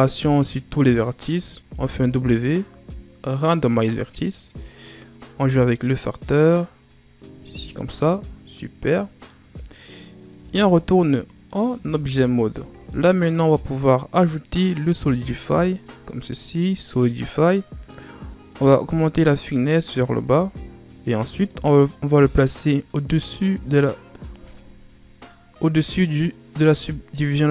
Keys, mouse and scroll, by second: 1.5 w, 5.2-7.9 drag, 7.9-10.3 middle drag, 10.3 Tab, 10.9 middle click, 11.6 a, 12.1-12.5 scroll up 4, 12.5 middle click, 13.1-13.5 scroll up 1, 13.5 right click, 14.7-22.9 drag, 24.5-25.2 scroll up 1, 25.2-27.5 middle drag.